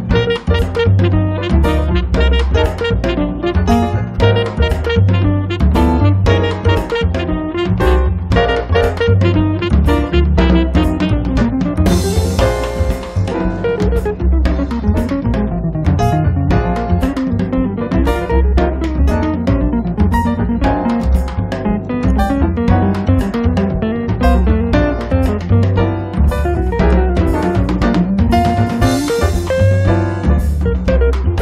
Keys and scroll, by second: 0.5 space, 1.0 Escape, 3.0 m, 3.9 Up, 5.5 ctrl+z, 6.2 space, 14.0 space, 14.5 Escape, 20.1 space.